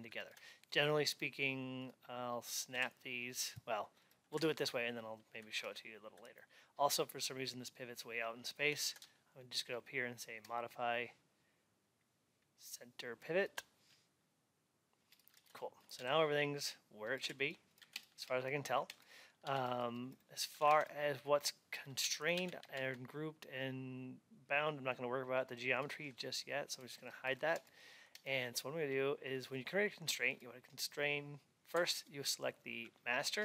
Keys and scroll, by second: 19.3 alt+x.